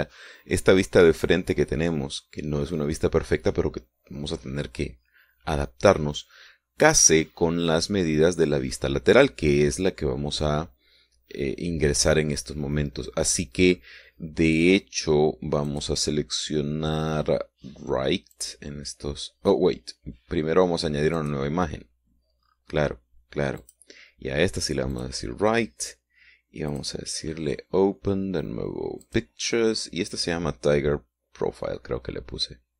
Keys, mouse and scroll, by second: 16.6 click, 19.2 click, 22.0 click, 23.3-24.0 scroll down 3, 24.5 click, 25.8 click, 27.6 click, 30.0 click.